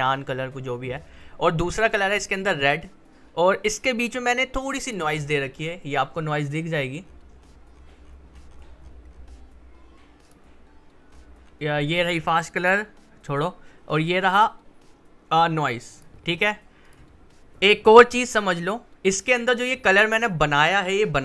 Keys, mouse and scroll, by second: 1.8-6.6 drag, 6.6-7.1 scroll down 1, 9.5-10.2 scroll up 1, 10.2 click, 11.1-11.7 scroll down 1, 12.6 click, 15.9 click, 20.1 click.